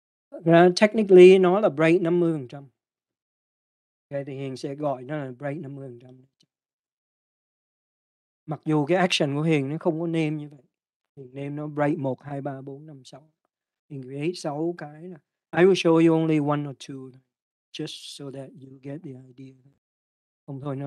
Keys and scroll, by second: 0.0-0.2 typing, 1.3 space, 3.0-3.8 typing, 6.4 Return.